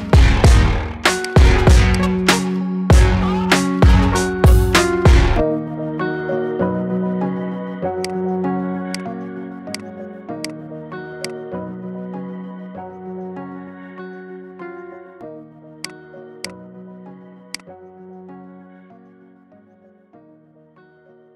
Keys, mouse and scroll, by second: 0.2 shift+click, 1.0 shift+click, 1.8 shift+click, 6.7 ctrl+j, 7.8-10.3 right drag, 10.3 click, 11.0 click, 11.4-11.8 scroll down 4, 11.8-12.5 middle drag, 12.5 scroll up 2, 12.9-13.5 shift+middle drag, 13.5-15.1 scroll up 1, 15.7 click, 16.3-19.4 right drag, 19.4 ctrl+2.